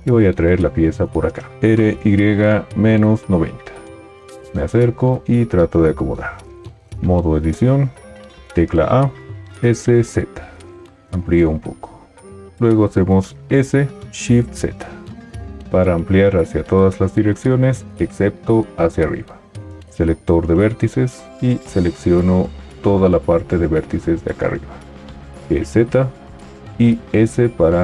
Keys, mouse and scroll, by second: 0.0 g, 1.6 r, 6.9 Tab, 8.4 a, 9.5 s, 13.4 s, 14.0 shift+z, 25.5 g, 27.1 s.